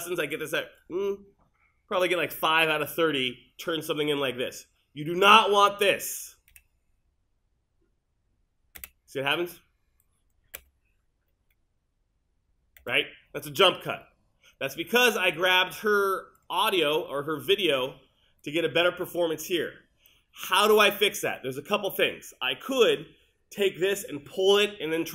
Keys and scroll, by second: 6.6 space, 8.8 space, 12.8 space.